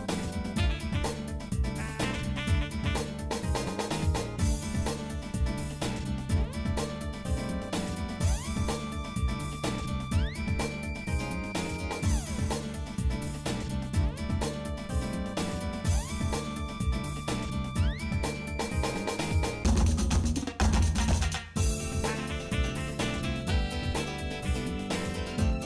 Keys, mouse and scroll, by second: 0.0 shift+middle click, 1.5 ctrl+Tab, 2.8 alt+shift+click, 3.6-8.7 shift+middle drag, 9.2 shift+middle click, 10.0 middle click, 10.5 shift+middle click, 11.0 shift+middle click, 11.3 shift+middle click, 11.7 shift+middle click, 12.3 shift+middle click, 13.6 click, 14.4 click, 15.2 shift+middle click, 16.3 ctrl+Tab, 17.5-19.6 shift+middle drag, 20.9 click, 22.3 click, 23.4 KP_Divide, 24.3 middle click, 24.8-25.4 scroll down 2, 25.4 middle click.